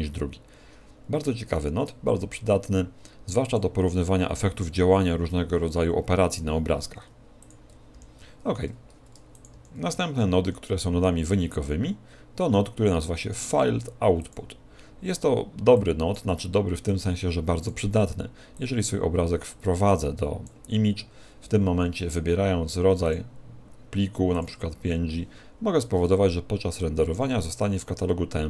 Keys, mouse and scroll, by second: 24.4 click.